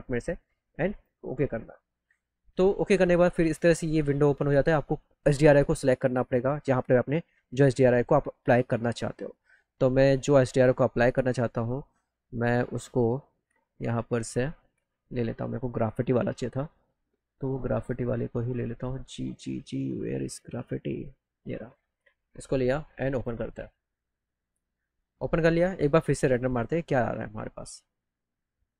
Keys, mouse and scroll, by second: 0.9 click, 7.4 click, 8.4 click, 14.3 middle click, 14.7 middle click, 15.2 middle click, 15.7 middle click, 16.2 middle click, 21.6 click, 21.6 right click, 23.1 click, 26.4 click.